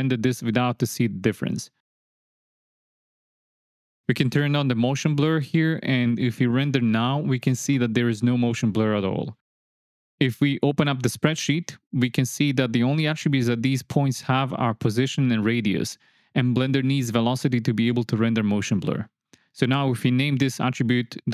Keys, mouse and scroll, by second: 0.6 click, 1.1 click, 1.5 click, 1.8 click, 2.2 ctrl+click, 2.5 click, 2.8 ctrl+click, 3.6 shift+click, 5.4 click, 6.2-6.9 drag, 10.3-11.2 drag, 13.4 click, 17.6 click.